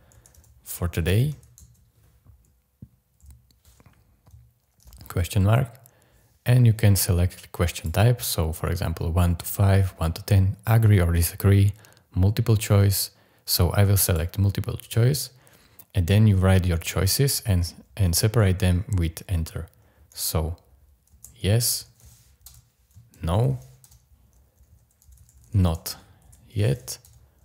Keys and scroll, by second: 0.0-1.6 typing, 3.2 y, 4.8 shift+', 21.1-23.4 typing, 23.8 Return, 24.8-27.3 typing.